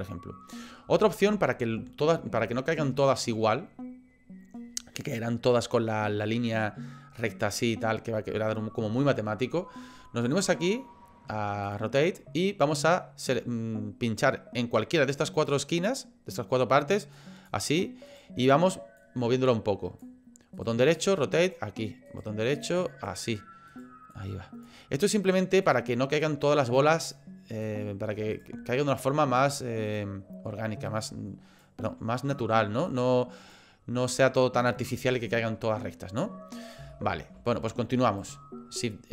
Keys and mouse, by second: 1.1 shift+middle click, 2.5 shift+middle click, 11.7 click, 17.1 click, 18.1 click, 19.0-20.1 drag, 20.6 click, 22.1 click, 22.6 click, 23.7 click, 24.1 click, 25.8 click, 27.2 click, 28.3 click, 28.9 click, 29.9 click, 30.9-32.5 drag, 32.9 click, 33.6-34.8 drag, 36.9 shift+middle click, 38.0 click.